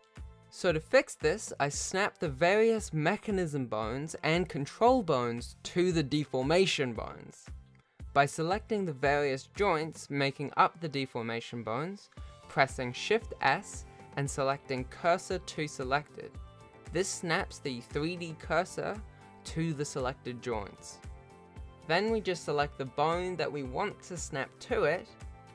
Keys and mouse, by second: 3.7 shift+middle click, 4.7 click, 5.8 shift+middle click, 6.1 alt+a, 6.7 shift+click, 7.2 shift+middle click, 7.9 ctrl+Tab, 8.3 shift+middle click, 9.0 shift+s, 9.3 Tab, 10.2 shift+s, 11.5 shift+middle click, 12.4 click, 13.3 shift+s, 14.6 click, 15.2 click, 15.5 click, 15.8 shift+s, 16.6 shift+middle click, 17.0 ctrl+z, 17.8 click, 18.5 click, 19.1 shift+a, 19.1 shift+s, 19.9 ctrl+z, 20.4 ctrl+z, 21.0 shift+s, 22.3 click, 23.9 shift+s, 24.7 shift+middle click, 25.2 shift+middle click.